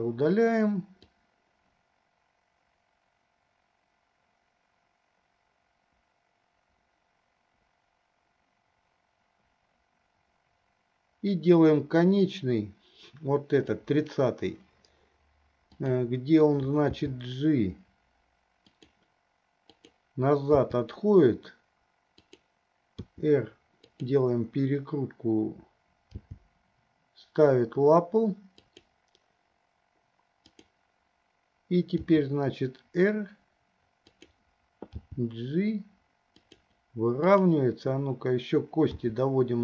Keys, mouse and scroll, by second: 1.3-14.1 drag, 15.8 click, 17.2 g, 19.9 click, 20.8 g, 23.3 r, 26.2 g, 30.7 click, 32.3 r, 35.2 g, 37.6 click, 39.2 r.